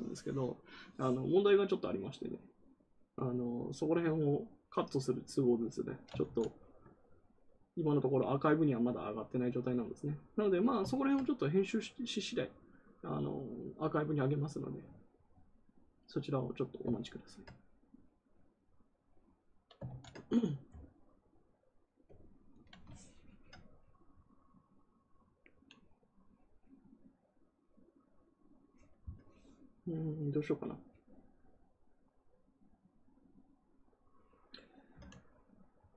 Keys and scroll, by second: 6.2 ctrl+z, 19.8 ctrl+z.